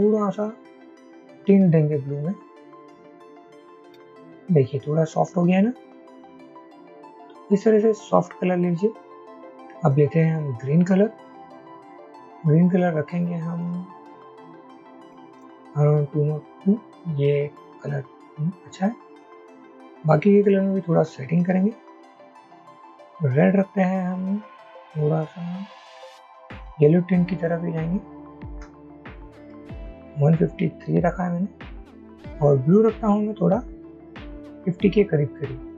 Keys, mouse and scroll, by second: 3.1 shift+Up, 3.3 shift+Up, 3.4 shift+Up, 3.6 shift+Up, 3.8 shift+Up, 6.7 Up, 7.2 Up, 15.1 Down, 15.5 Down, 25.1 shift+Up, 25.2 shift+Up, 25.3 shift+Up, 25.5 shift+Up, 25.7 shift+Up, 25.9 shift+Up, 26.0 shift+Up, 26.1 shift+Up, 26.3 shift+Up, 26.4 shift+Up, 26.5 shift+Up, 27.5 shift+Up, 27.7 shift+Up, 28.2 shift+Up, 29.1 Up, 29.5 Up, 34.4 shift+Up, 34.6 shift+Up, 34.9 shift+Up, 35.1 shift+Up.